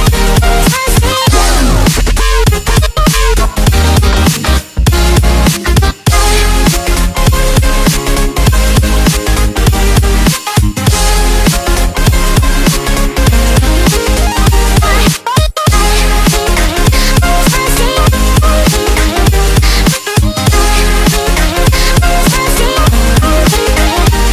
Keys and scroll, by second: 2.4 v, 6.7 Delete, 7.6 ctrl+z, 16.3 Delete, 17.2 ctrl+z.